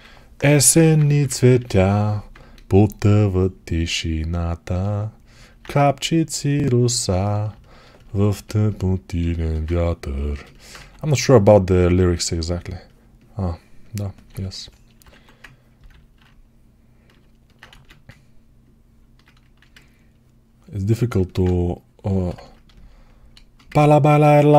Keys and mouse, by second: 0.5-7.3 drag, 0.5 [, 0.6-2.2 [, 7.3-12.3 right drag, 10.6 2, 12.3-17.4 shift+drag, 17.4-22.2 ctrl+right drag, 17.5 ctrl+z, 22.2-24.5 ctrl+alt+drag.